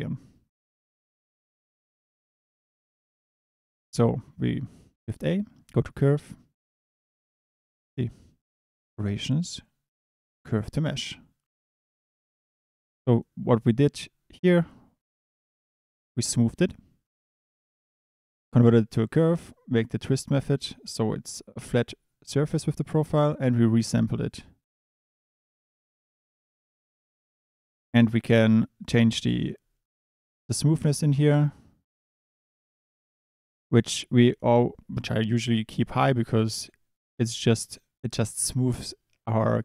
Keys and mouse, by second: 11.6 click, 12.9 click, 15.8 click, 19.4 click, 23.3 click, 28.9 click, 31.1-37.1 drag.